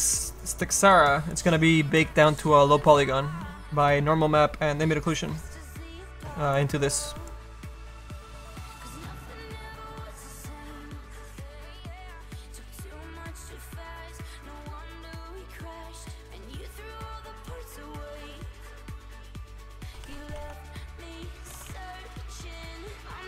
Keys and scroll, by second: 6.5 space, 16.3 e, 17.5-22.9 typing.